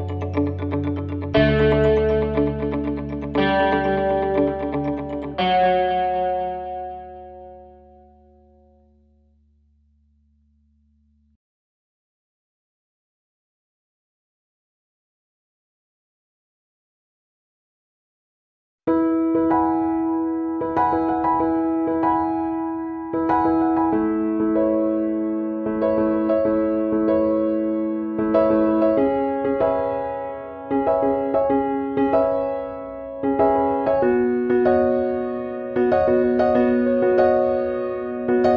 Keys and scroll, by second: 2.5 ctrl+c, 2.7 ctrl+v, 7.3 ctrl+c, 7.6 ctrl+v, 26.5 ctrl+c, 26.8 ctrl+v, 32.3 ctrl+c, 32.4 ctrl+v.